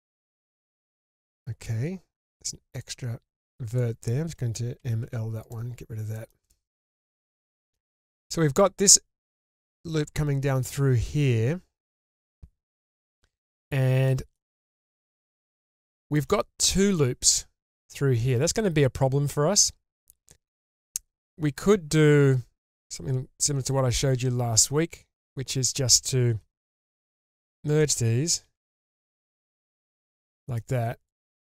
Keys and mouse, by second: 0.4-1.4 middle drag, 2.8 click, 3.7 shift+click, 4.8 m, 5.4-6.1 drag, 6.2 shift+middle click, 6.4-6.9 shift+middle drag, 7.2-7.7 middle drag, 7.9-8.2 shift+middle drag, 13.1 shift+middle click, 14.0 middle drag, 14.5-14.9 shift+middle drag, 15.4-15.8 middle drag, 15.9 shift+middle click, 20.9 middle click, 22.7 k, 26.4 1, 26.8 click, 27.2 shift+click, 28.4 m, 29.2-30.6 middle drag, 31.1 click.